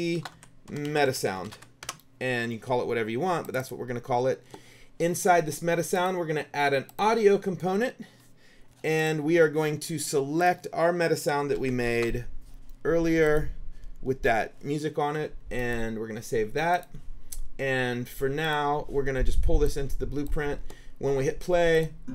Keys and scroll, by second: 0.0-2.1 typing, 11.2-12.4 typing.